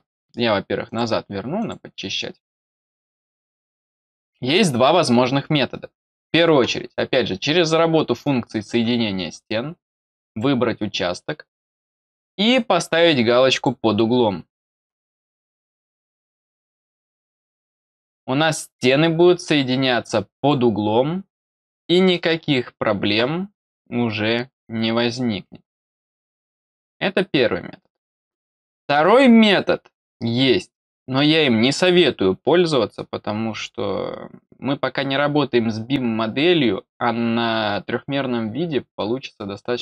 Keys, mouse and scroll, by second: 0.8 click, 1.5 click, 2.9 click, 10.2 click, 13.4 click, 17.0 click, 18.7 click, 20.3 click.